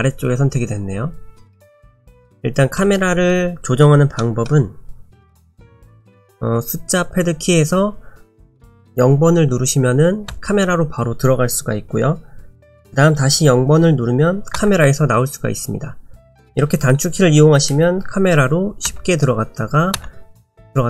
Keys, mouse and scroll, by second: 1.7-3.6 scroll down 3, 2.2 middle click, 4.2 middle click, 10.3 KP_0, 12.6 KP_0, 14.6 KP_0, 18.9 KP_0, 19.9 KP_0.